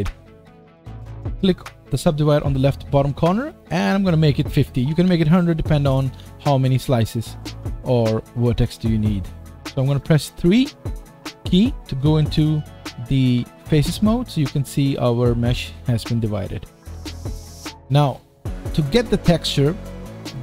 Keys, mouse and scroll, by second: 2.5-7.2 drag, 7.2-17.8 middle drag, 8.5 Tab, 8.8 Tab, 9.0 scroll up 3, 13.3 3, 16.9 Tab, 17.8 click, 17.9-20.4 middle drag.